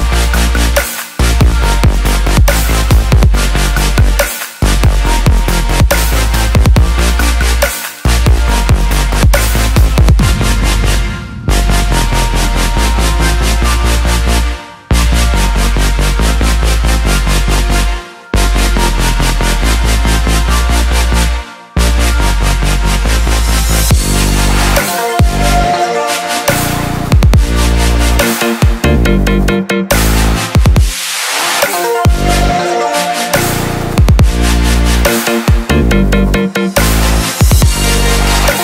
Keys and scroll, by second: 4.6 ctrl+z, 32.3 ctrl+=.